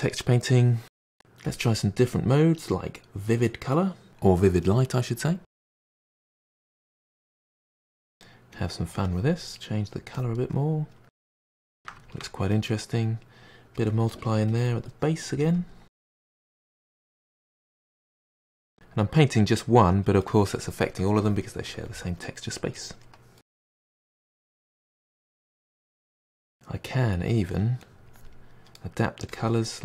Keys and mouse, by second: 5.5 click, 5.6 f, 5.9-7.1 drag, 7.1 middle drag, 7.3 drag, 7.5-7.9 middle drag, 7.9 click, 9.1-9.6 drag, 9.6-10.2 middle drag, 10.2-10.6 drag, 10.6-11.2 middle drag, 11.2 drag, 11.3-13.9 middle drag, 13.9 drag, 14.1-14.5 middle drag, 14.5-15.1 drag, 15.1 middle click, 15.5-16.0 drag, 16.0 middle drag, 16.2 drag, 16.4 middle click, 17.1-17.5 drag, 17.5-17.9 middle drag, 17.9 drag, 18.1-18.7 middle drag, 18.7-19.2 drag, 19.2-22.8 middle drag, 22.8-26.4 drag, 26.8-27.3 drag, 27.3 middle drag, 27.5 drag, 27.6 middle drag, 27.9 click, 28.0-28.6 middle drag, 28.6 click, 28.7 middle click, 29.1 click, 29.2 middle drag, 29.5 drag, 29.7 middle drag.